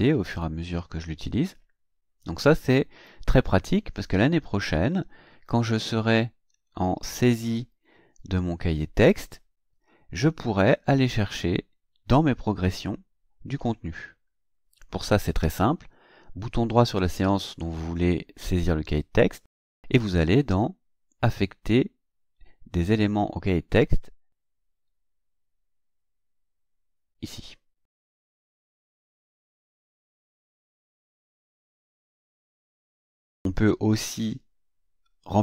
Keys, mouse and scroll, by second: 6.9 click, 16.5 right click, 28.9 click, 32.5 click.